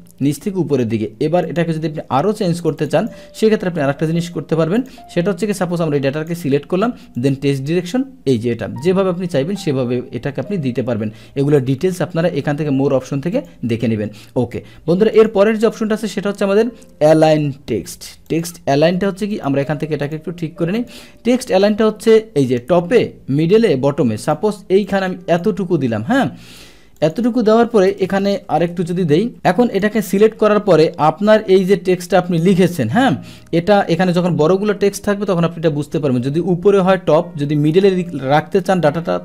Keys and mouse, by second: 1.5 click, 1.9 ctrl+a, 2.6 click, 2.8 click, 3.0 click, 4.0 ctrl+a, 4.8 click, 5.5 click, 7.2 click, 13.4 click, 15.2 click, 18.3 click, 19.3 click, 20.0 click, 20.8 click, 24.2 click, 24.9 click, 27.0 click, 27.9 Return, 28.2 Return, 29.3 click, 32.6-33.5 drag.